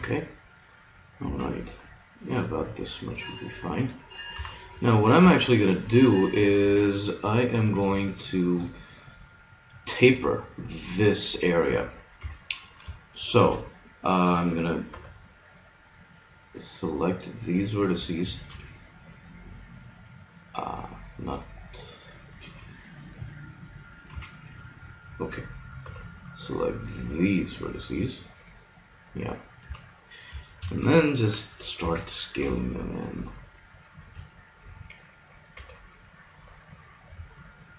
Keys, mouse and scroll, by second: 1.3 s, 3.7 click, 4.3 KP_3, 6.3 a, 8.1-10.2 middle drag, 12.2 KP_1, 13.1-14.8 middle drag, 14.9 b, 24.1 KP_1, 24.7-25.1 scroll up 1, 25.8 b, 27.7-28.7 drag, 29.7 KP_1, 30.4 click, 31.8 s, 35.6 b.